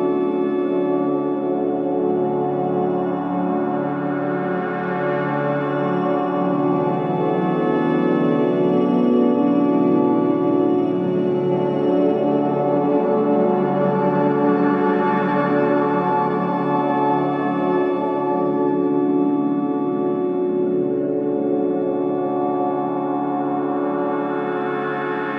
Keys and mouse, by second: 1.2 alt+shift+click, 2.4 middle click, 4.3 click, 6.6 click, 7.4-8.9 middle drag, 9.8-13.2 middle drag, 14.1 middle click, 14.9 shift+middle click, 16.0 alt+z, 16.9-18.2 middle drag, 19.9 alt+shift+click, 22.4 click, 22.8 click, 23.9-24.5 middle drag.